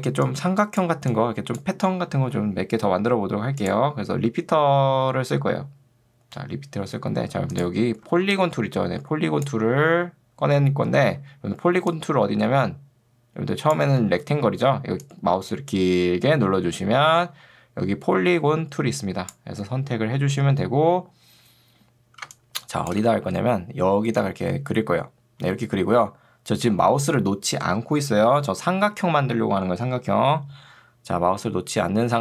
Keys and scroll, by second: 2.3 Escape, 8.1 ctrl+2, 11.1 Escape, 22.3 space.